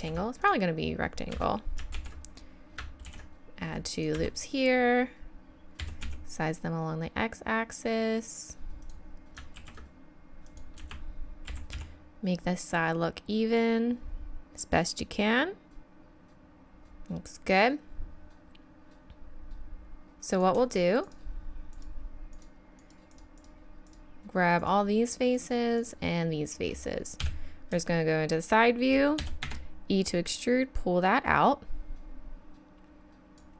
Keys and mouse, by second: 0.0 ctrl+r, 2.0 ctrl+z, 3.0 ctrl+r, 5.8 s, 9.6 ctrl+r, 11.5 s, 20.0-23.2 drag, 20.3 right click, 27.2 KP_3, 29.2 e.